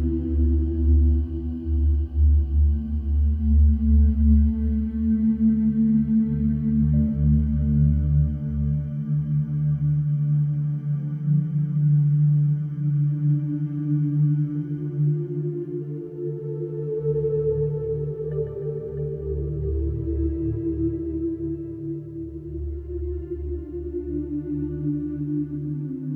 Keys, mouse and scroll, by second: 1.4 shift+a, 3.2 ctrl+s, 4.0 s, 5.8-6.4 scroll up 7, 7.7 click, 8.4 click, 9.2-10.5 middle drag, 10.5 click, 10.7 scroll up 2, 11.3-13.2 shift+middle drag, 13.6-14.1 shift+middle drag, 14.1 shift+a, 17.3 alt+middle click, 17.9 g, 19.7 g, 22.4-23.2 shift+middle drag, 23.2 g, 25.1 alt+middle drag, 25.7 g.